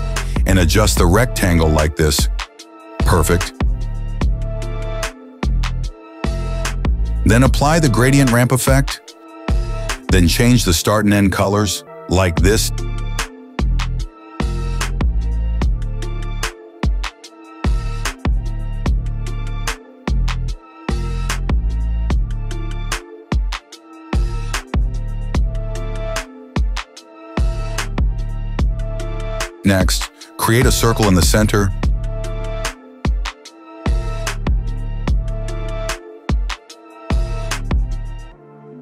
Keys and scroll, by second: 23.5 Return, 24.6-27.2 typing.